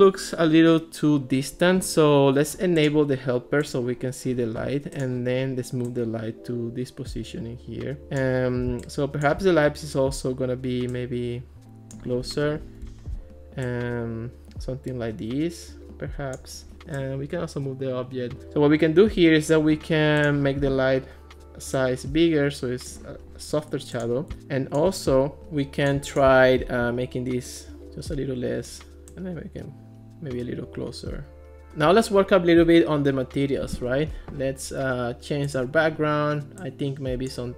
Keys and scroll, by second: 12.5 alt+r.